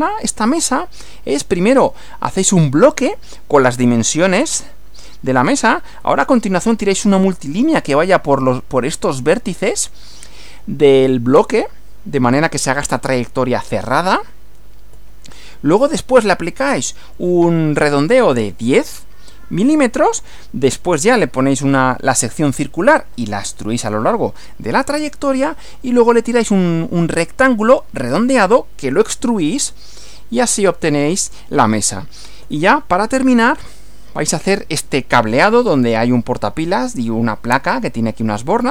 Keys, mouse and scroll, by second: 0.5 Right, 6.0 Right, 15.0 Right, 19.7 Right, 24.8 Right, 32.4 Right.